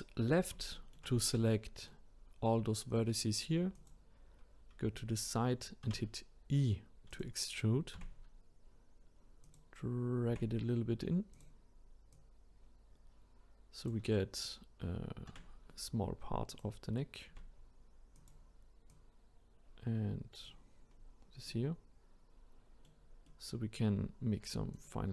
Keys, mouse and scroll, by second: 0.7-3.7 shift+middle drag, 3.7 click, 5.8 e, 8.0 s, 10.3 s, 12.1-15.2 drag, 15.3 e, 17.3 s, 18.9 click, 20.9-21.5 scroll down 1, 21.5-24.7 middle drag, 24.7 click.